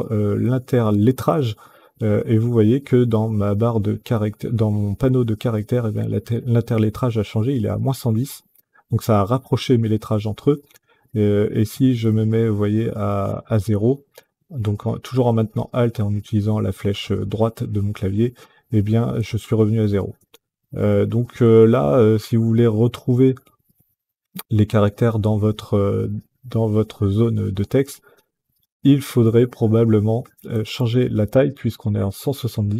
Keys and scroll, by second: 0.7 alt+Right, 1.8 alt+Right, 10.2 alt+Right, 12.5 alt+Right, 14.8 alt+Right, 19.6 alt+Left, 30.2 KP_1, 30.5 KP_5, 30.7 KP_0, 31.0 Return.